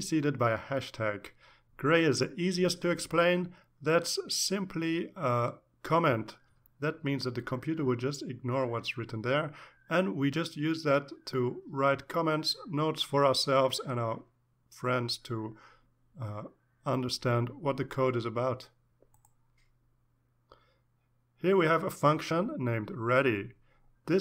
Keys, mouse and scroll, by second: 1.0-2.4 drag, 23.9-24.2 drag.